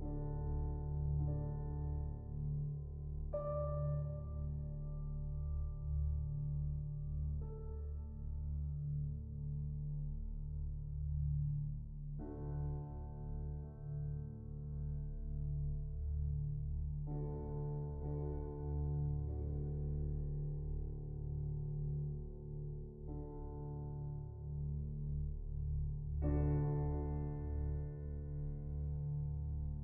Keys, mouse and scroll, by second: 0.0-1.8 drag, 1.8 middle click, 2.1-2.5 scroll up 1, 2.5-4.0 drag, 11.8-15.3 drag, 15.3 shift+a, 17.0-17.5 drag, 17.5-18.2 middle drag, 18.2-18.8 scroll up 1, 19.4-21.1 drag, 21.7-23.0 middle drag, 23.0-24.4 drag, 24.4 ctrl+t, 28.0-29.1 shift+drag.